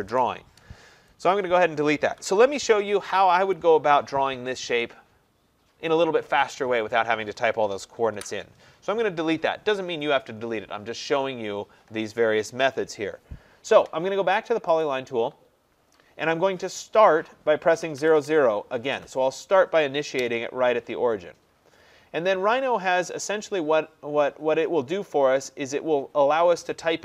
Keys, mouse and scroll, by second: 0.1 Return, 1.4 click, 2.3 Delete, 3.6 click, 8.2 Delete, 14.8 click, 17.8-18.2 typing, 20.2 Return.